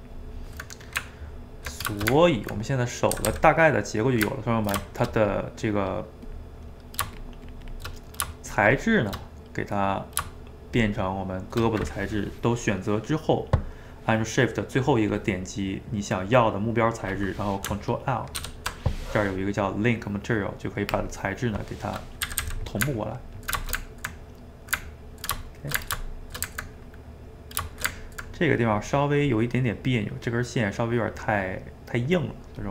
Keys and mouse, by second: 1.0 Tab, 2.0-3.2 ctrl+shift+middle drag, 3.2 a, 3.3 a, 3.5-5.4 middle drag, 5.4 click, 6.3 click, 7.2 shift+click, 7.9 middle click, 8.6 shift+click, 8.8 shift+click, 9.3-10.8 middle drag, 10.8 shift+click, 15.8-18.4 middle drag, 18.4 ctrl+l, 22.0 middle click, 22.3 a, 22.5 a, 22.7-26.2 ctrl+middle drag, 26.2 shift+right click, 27.0 middle click, 27.7 shift+right click, 27.9-32.7 ctrl+middle drag.